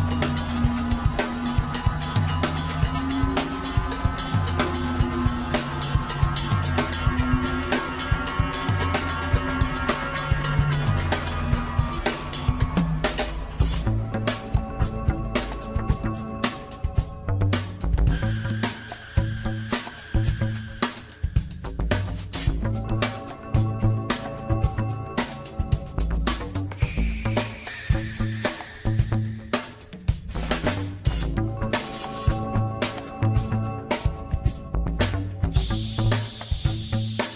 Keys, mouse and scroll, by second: 4.9 s, 7.1 scroll down 1, 7.3-7.9 middle drag, 7.9-8.3 scroll up 5, 8.3-9.5 middle drag, 9.8 s, 11.8 scroll down 2, 11.9 middle click, 12.4 scroll down 5, 12.6 drag, 12.8-14.0 middle drag, 14.2 click, 14.7 click, 15.1 scroll up 4, 15.4 click, 15.6-16.0 right drag, 16.0 click, 16.2 scroll down 2, 16.4-17.6 middle drag, 17.7 scroll down 1, 17.8 drag, 18.2-19.0 middle drag, 19.0-19.8 scroll up 2, 19.8 click, 20.0 middle click, 20.7 click, 21.2 click, 21.4-22.1 middle drag, 22.1 click, 22.5 scroll down 2, 23.6 shift+a, 28.6-31.7 drag, 33.8-35.0 drag, 35.3 click, 35.7 s, 36.3 ctrl+z, 36.5 click, 36.9 s.